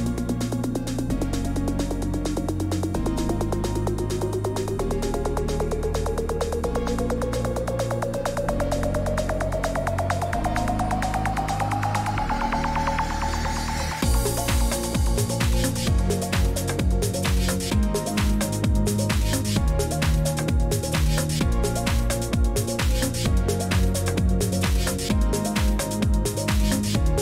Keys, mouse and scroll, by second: 8.9 click, 10.5 click, 12.0 click, 13.7 click, 14.5 click, 16.5 click, 22.1 click, 22.9 click.